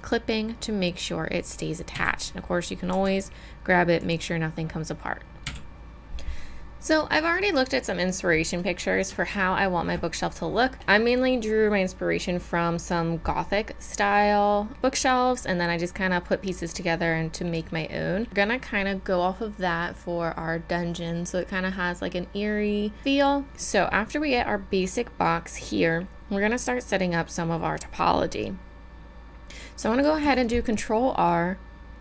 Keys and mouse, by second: 0.0-2.0 drag, 2.0 a, 3.0 g, 5.5 a, 9.3-10.7 middle drag, 17.7 middle click, 30.0 ctrl+r.